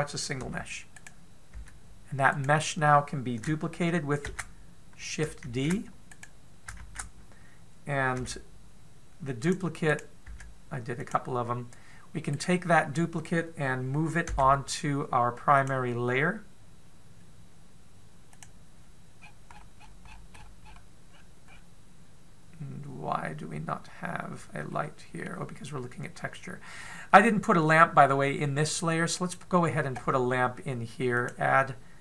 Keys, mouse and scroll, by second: 1.1 g, 2.2 g, 6.5 shift+d, 9.0 shift+d, 10.5 right click, 10.9 g, 12.9 right click, 14.8 m, 19.0 click, 19.8-22.0 scroll down 43, 21.7-22.4 scroll up 5, 25.3 middle click, 27.7 middle click, 28.7-29.2 scroll down 4, 29.2 middle click, 29.7 scroll up 1, 31.7 click.